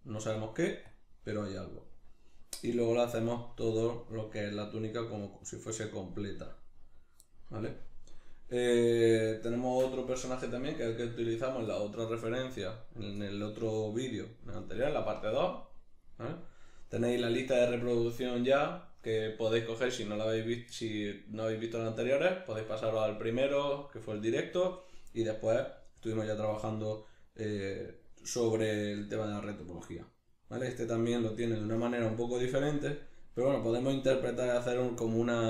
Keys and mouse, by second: 11.7 middle click, 12.3 middle click, 13.1-35.4 middle drag.